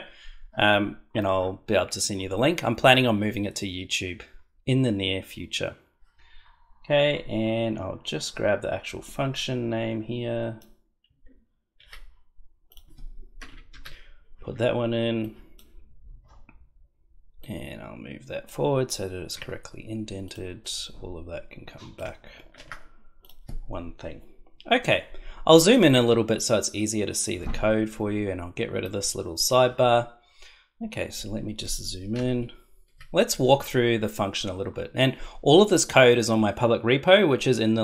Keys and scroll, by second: 11.8 ctrl+c, 13.4 Return, 13.7 ctrl+v, 19.3 Tab, 22.5 shift+Tab, 32.1 ctrl+=.